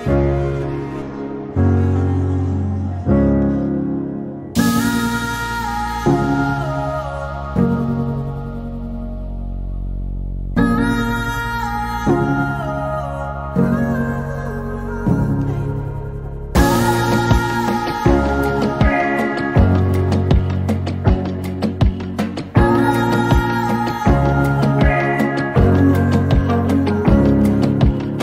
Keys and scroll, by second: 25.1-27.2 typing.